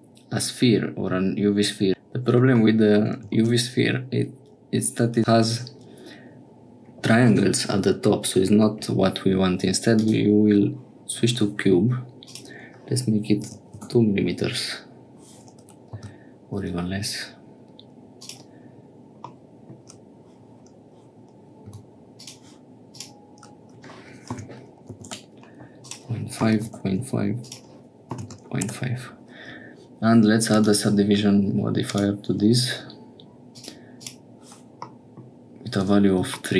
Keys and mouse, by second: 3.3 shift+a, 12.2-15.1 drag, 15.9 s, 19.3 click, 21.6 s, 22.9-25.6 drag, 25.8-27.2 drag, 27.4-29.2 drag, 30.5-32.1 drag, 33.5 click, 33.9 click, 34.9 middle click.